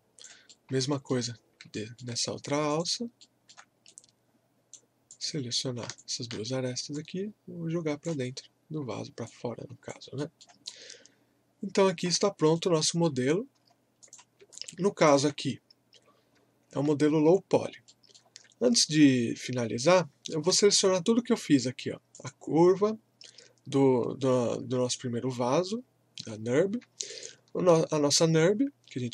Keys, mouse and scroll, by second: 0.5 alt+middle click, 1.4 scroll up 1, 1.7 alt+middle click, 2.2-2.7 scroll up 1, 2.7 click, 3.2 alt+middle click, 3.9 right click, 5.1 click, 6.0-8.3 shift+drag, 8.3 scroll down 1, 9.3 alt+click, 10.2 alt+middle click, 10.7-12.5 alt+drag, 12.5 right click, 13.6-14.0 scroll down 1, 14.0 click, 14.5-16.4 drag, 16.4 scroll down 2, 17.6 scroll up 1, 17.9 middle click, 19.9-22.1 alt+middle drag, 22.1 click, 27.1 shift+Num_Lock, 27.1 shift+click.